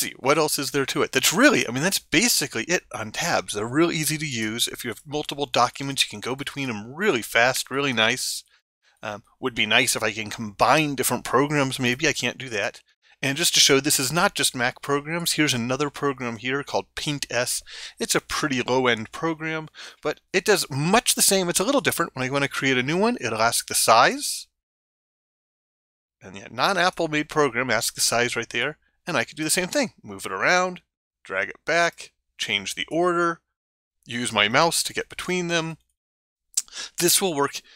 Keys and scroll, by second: 5.4 ctrl+Tab, 34.1 ctrl+Tab.